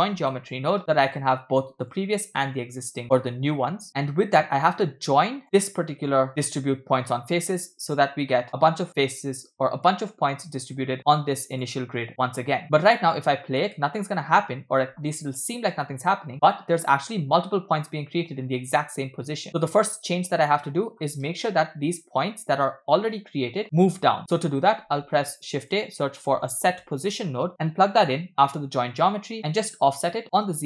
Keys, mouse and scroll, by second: 2.3-3.2 drag, 3.9-5.4 drag, 5.5 click, 6.7-8.1 drag, 8.3 middle click, 8.5 click, 11.6 click, 12.6-13.7 middle drag, 13.8 space, 15.9 space, 16.3-16.7 scroll up 3, 19.5-20.6 drag, 21.5 Right, 23.7 Right, 24.2 middle click, 24.8 shift+a, 30.0-30.6 drag.